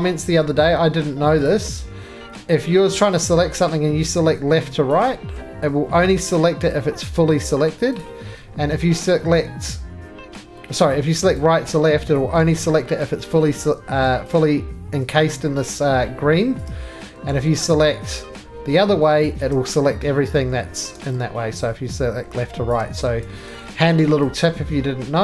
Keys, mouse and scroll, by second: 0.1-1.0 scroll, 1.0-3.8 middle click, 1.1 scroll, 1.4 click, 4.8 shift+click, 8.0 click, 12.1 shift+click, 13.4 ctrl+z, 16.5 shift+click, 17.3 ctrl+z, 19.2 shift+click, 20.6 ctrl+z, 22.7 shift+click, 23.0 ctrl+z.